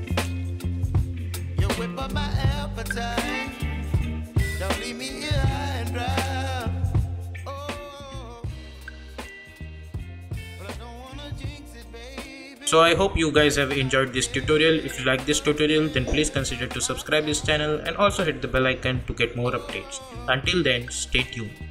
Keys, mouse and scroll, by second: 0.7 space, 3.2-7.0 drag.